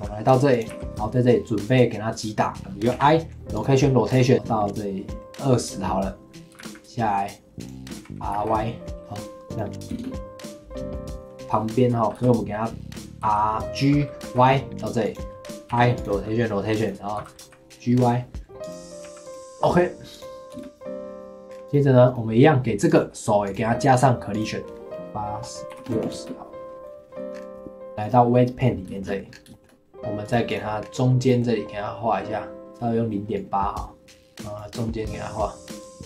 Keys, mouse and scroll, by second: 0.7 r, 0.8 g, 2.9 i, 4.3-6.5 drag, 6.5 g, 7.9 r, 9.5 click, 9.9 space, 10.9-11.4 middle drag, 11.4 click, 11.4-12.1 middle drag, 12.1 KP_7, 13.2 g, 15.7 i, 16.8 click, 17.1 g, 19.0 i, 20.1 click, 20.5 space, 21.5 scroll down 1, 21.6 middle click, 21.6 click, 22.0 click, 23.0 click, 24.4-26.1 drag, 26.1 space, 27.0 middle click, 27.4-27.9 scroll up 4, 27.9 middle click, 28.0 click, 28.9 shift+middle click, 29.3 scroll up 2, 29.5 shift+middle click, 30.2 click, 30.5 click, 30.8-31.2 scroll up 2, 31.2-32.7 middle drag, 32.7-34.8 drag, 34.8-35.9 middle drag, 35.9 click.